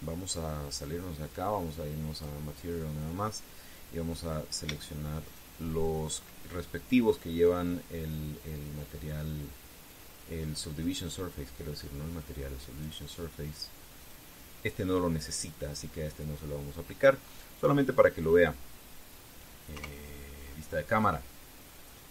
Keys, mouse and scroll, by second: 1.4 click, 2.8 click, 5.5 shift+right click, 6.0 shift+right click, 7.5 shift+right click, 9.4 click, 11.6 right click, 12.8 click, 13.4 right click, 14.7 click, 17.2-17.6 scroll down 1, 17.9 scroll up 1, 18.6 scroll down 1, 20.4 KP_0.